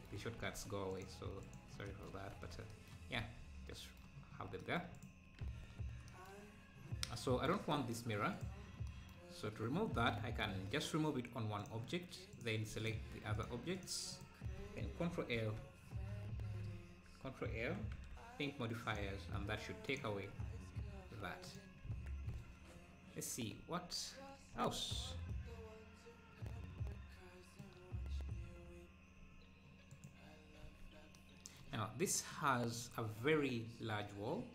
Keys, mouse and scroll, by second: 0.5 ctrl+s, 1.0 click, 3.3 ctrl+s, 4.3-4.6 scroll down 3, 5.0 click, 5.5 ctrl+s, 6.6 scroll up 1, 8.4 click, 9.5 scroll up 2, 11.6-14.5 drag, 15.4 ctrl+l, 16.1 scroll down 5, 16.4 `, 17.9 ctrl+l, 19.9 click, 20.3-20.6 scroll up 4, 21.5 click, 21.9 ctrl+s, 24.6 ctrl+s, 25.3-28.3 middle drag, 28.3 click, 29.9 click, 30.7 ctrl+s, 32.1-34.5 middle drag.